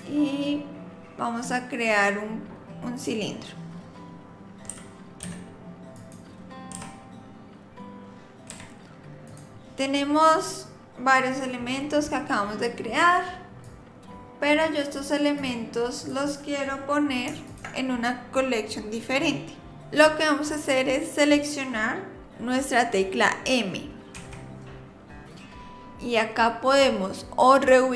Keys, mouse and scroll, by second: 4.7 g, 6.7 g, 13.6 click, 15.4 click, 16.0 click, 17.4 shift+click, 24.1 m.